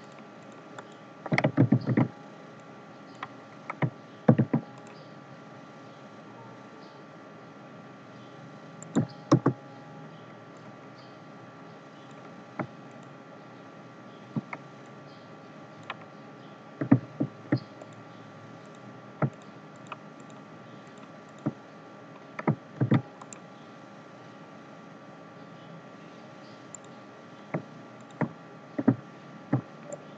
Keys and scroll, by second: 1.7 ctrl+c, 1.9 ctrl+f, 4.2 ctrl+g, 22.8 ctrl+g.